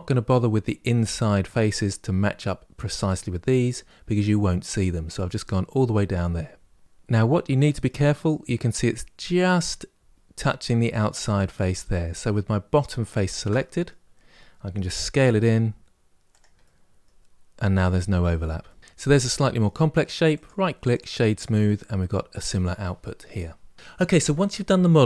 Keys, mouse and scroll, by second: 6.8 scroll up 2, 7.0-10.0 middle drag, 11.7-15.1 middle drag, 15.1 s, 16.4-20.1 middle drag, 20.1-21.1 right drag, 21.1-23.7 middle drag.